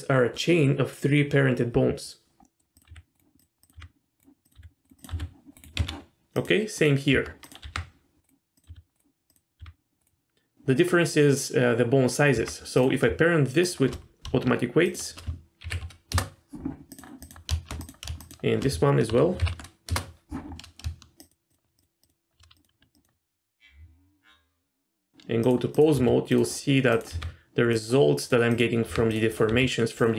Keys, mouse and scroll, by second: 2.4 middle click, 2.7 click, 2.9 r, 3.4 click, 3.6 click, 3.7 r, 4.4 click, 4.5 r, 5.0 click, 5.1 r, 5.7 Tab, 6.4 click, 7.1 Tab, 7.4 click, 7.6 r, 8.6 click, 8.7 r, 9.3 click, 9.6 r, 12.3 Tab, 12.7 click, 13.6 shift+click, 14.8 shift+click, 15.6 ctrl+p, 16.9 click, 17.3 click, 18.2 shift+click, 19.4 ctrl+p, 21.2 shift+click, 21.5 shift+click, 21.7 shift+click, 22.0 shift+click, 22.5 ctrl+click, 22.9 ctrl+click, 23.8 Tab, 25.4 click, 25.7 click, 25.9 r, 26.9 click, 27.1 r, 28.5 click, 28.9 r, 29.1 click, 29.3 click, 29.5 r.